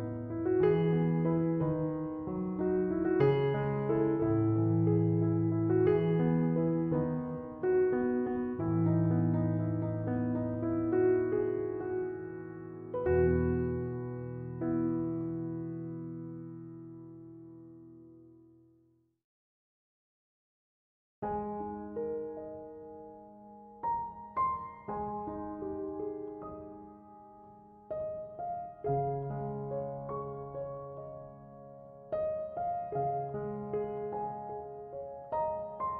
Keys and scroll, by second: 1.2 1, 1.5 Return.